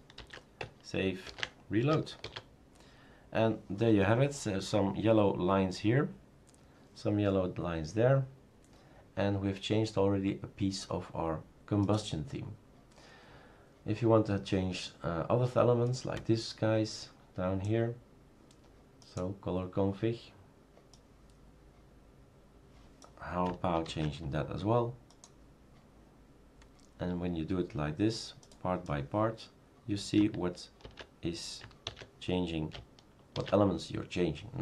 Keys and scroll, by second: 0.2 ctrl+v, 1.2 ctrl+s, 2.2 shift+super+r, 23.9 ctrl+c, 30.8 ctrl+v, 31.8 ctrl+s, 33.3 shift+super+r.